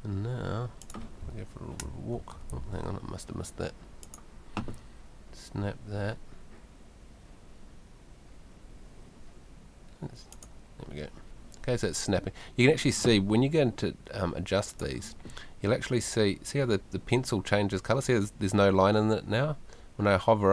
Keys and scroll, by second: 1.2 a, 1.8 w, 2.6 Escape.